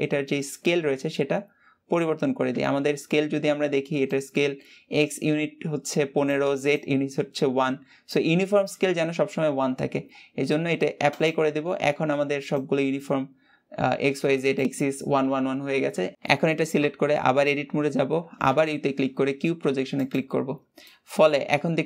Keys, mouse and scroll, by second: 19.9 u, 20.8-21.8 middle drag.